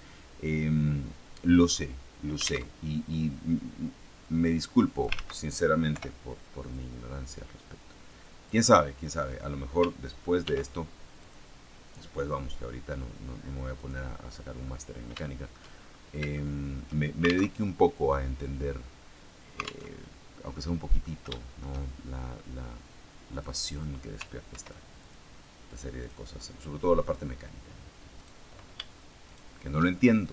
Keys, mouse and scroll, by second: 2.6 alt+Tab, 4.1-5.1 drag, 5.1 ctrl+z, 6.6-8.6 drag, 8.6 middle click, 10.4 ctrl+r, 11.1 click, 13.7 click, 14.0 middle click, 15.2 shift+middle click, 15.6-16.6 shift+scroll up 4, 16.2 shift+middle click, 17.5 alt+Tab, 20.4 middle click, 21.2 shift+middle click, 23.2 click, 24.4 ctrl+r, 24.9 ctrl+click, 25.9 click, 27.0 click, 28.1 right click, 29.2 shift+right click, 30.0 shift+middle click.